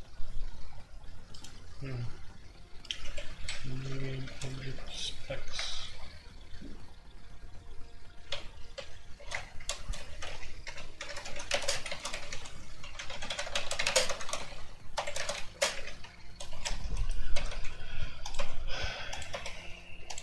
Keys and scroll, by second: 3.0 Escape, 3.7-5.5 typing, 8.2-16.1 typing, 15.5 Escape, 15.7 shift+Insert, 16.4 Escape, 16.6 F2, 17.3 ctrl+c, 17.4 ctrl+c, 18.7-20.2 typing.